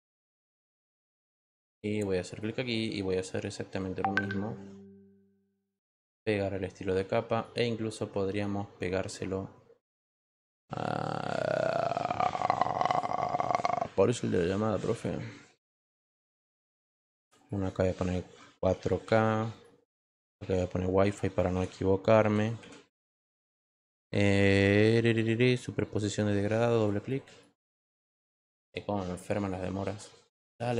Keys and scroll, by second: 21.5 i.